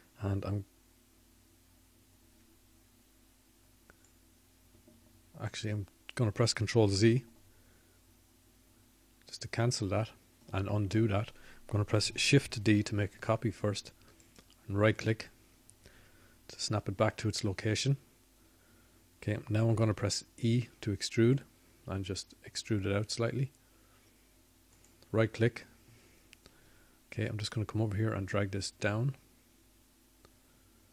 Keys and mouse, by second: 4.2 e, 13.1 ctrl+z, 18.8 shift+d, 25.9 e.